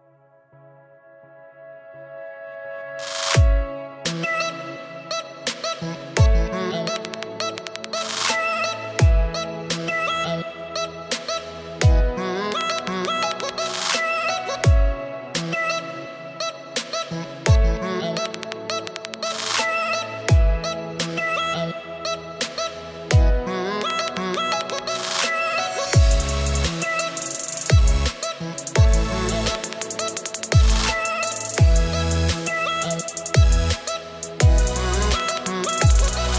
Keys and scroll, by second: 1.7 -, 2.1 +, 3.2 space, 4.6 space, 8.7 +, 9.2 space, 11.0 space, 12.3-14.1 typing, 17.6 space, 20.3-23.7 typing, 24.8 space, 26.6 r, 27.9 space, 31.1 -, 32.3 space, 34.5 -.